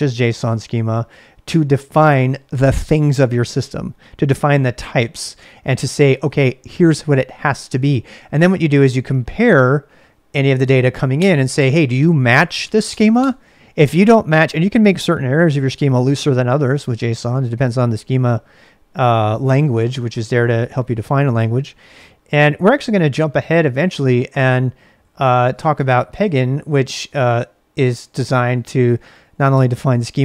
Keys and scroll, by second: 22.7 ctrl+a, 23.1 c, 24.9-29.7 typing.